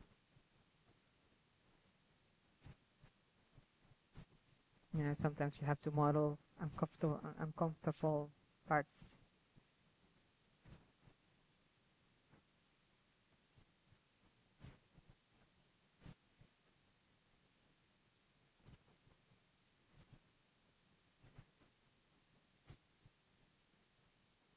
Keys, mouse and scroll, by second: 0.3 KP_3, 4.0 z, 4.7 middle click, 4.8-5.5 drag, 4.8 z, 5.3 f, 6.2 click, 6.9-7.7 middle drag, 7.7 KP_3, 7.8 z, 8.2 click, 8.4 z, 9.7 click, 9.8 right click, 10.0 h, 10.8 click, 11.3 middle click, 11.4 click, 12.0-15.6 middle drag, 15.6-17.9 typing, 17.0 click, 17.4-17.9 drag, 18.0 click, 18.4-18.8 drag, 19.1 g, 19.3-21.4 drag, 20.8 KP_3, 21.5-23.0 drag, 23.0 KP_3, 23.6-24.5 drag.